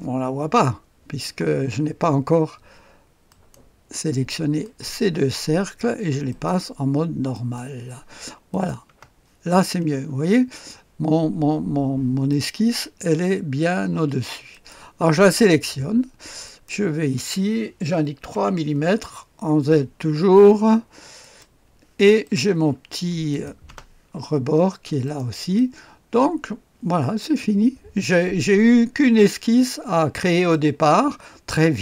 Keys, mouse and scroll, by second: 1.7-2.8 scroll up 1, 2.8-3.2 scroll up 1, 3.2 click, 3.2 middle click, 4.6 click, 4.6 middle click, 6.3 click, 6.3 middle click, 7.1 click, 7.6 click, 8.7 click, 8.9-10.2 typing, 12.3 click, 14.5 middle click, 14.7 click, 16.4 middle click, 16.7 click, 18.3 KP_3, 21.2 click, 22.2 right click, 22.4 click, 23.3 right click, 23.4 click, 23.9 space, 25.0 right click, 25.2 click, 30.5 click.